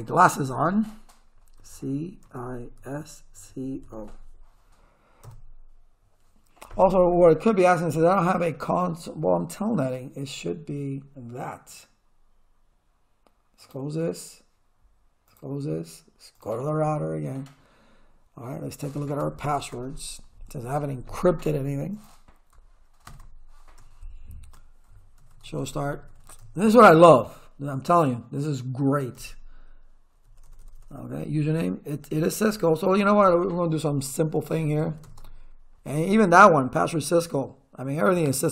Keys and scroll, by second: 1.6-3.9 typing, 5.3 Return, 19.2 ctrl+z, 19.7 Return, 23.1 ctrl+z, 23.8 Return, 25.0-26.7 typing, 29.2 Return, 33.0 space, 34.3-35.5 typing.